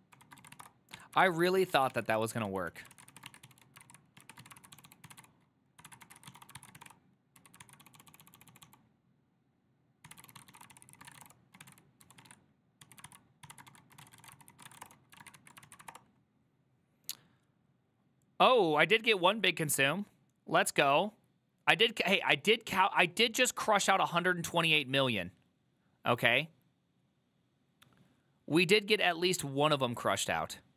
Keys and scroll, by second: 0.0-8.4 typing, 9.9-15.5 typing, 13.2 ctrl+c, 15.3 ctrl+a, 15.7 ctrl+c, 15.9 Up, 16.0 Return.